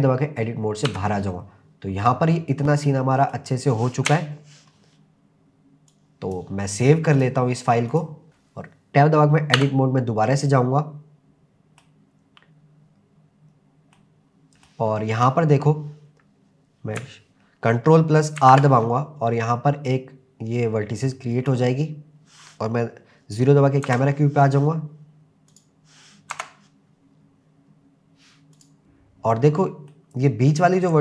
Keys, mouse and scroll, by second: 0.9 Tab, 1.2 scroll down 2, 2.7-3.2 scroll down 2, 3.2 middle click, 4.1 KP_0, 5.9 click, 7.1 click, 8.3-9.6 scroll up 3, 9.6 Tab, 10.5-11.8 middle drag, 13.5 scroll down 1, 14.0 middle click, 15.1-15.8 scroll up 2, 18.4 ctrl+r, 21.4 c, 23.9 KP_0, 25.5 click, 26.3 KP_0, 28.5 click, 29.9-31.0 middle drag.